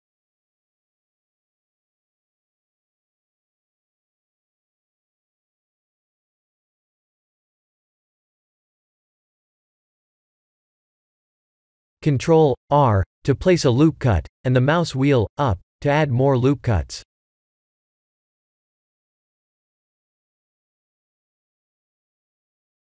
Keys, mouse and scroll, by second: 0.8 e, 1.9 s, 3.6 ctrl+z, 3.8 ctrl+z, 4.0 ctrl+z, 4.5 ctrl+z, 5.5 ctrl+z, 6.2 g, 8.9 s, 12.7 ctrl+r, 15.3 right click, 16.4 middle click, 16.7 middle click, 17.0 middle click, 17.3-17.9 scroll up 5, 17.9 middle click, 18.5 3, 19.3 click, 19.7-20.0 scroll up 3, 20.8 KP_1, 21.5 shift+middle click, 22.6 shift+z.